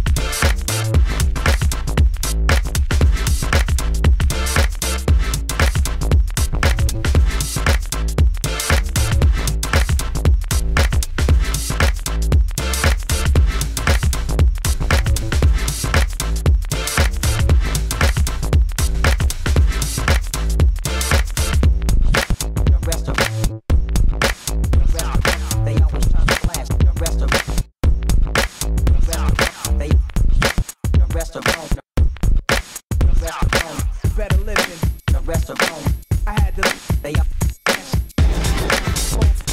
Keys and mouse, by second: 6.9 ctrl+s, 7.7 alt+s, 8.4-9.3 middle drag, 10.2 Tab, 10.6 Tab, 12.2 KP_1, 13.6 Tab, 14.1-16.9 typing, 14.4 Tab, 14.7 ctrl+s, 15.0 Tab, 16.5 Tab, 17.3 ctrl+s, 18.3 ctrl+s, 18.3 g, 19.7 f, 22.5 Tab, 22.8-23.1 a, 23.2 ctrl+f, 23.9 Tab, 24.1 f, 24.7 f, 28.5 f, 33.9 s, 35.1 f, 38.7 f.